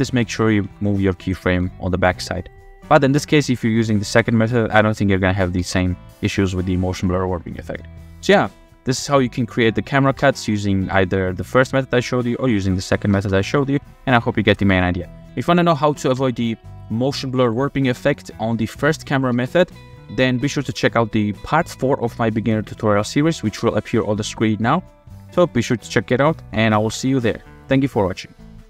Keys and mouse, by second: 0.2 click, 0.7 g, 1.5 g, 2.5-3.2 drag, 3.9 click, 4.8 drag, 5.6 space, 10.0 space, 10.6 click, 13.1 space, 16.1 space, 17.2-17.6 drag, 18.6 shift+click, 19.3 space, 23.4 space, 25.3 click, 25.7 click, 26.0 middle click, 26.4 f, 27.2-27.5 shift+middle drag, 27.3 shift+drag, 27.5 click.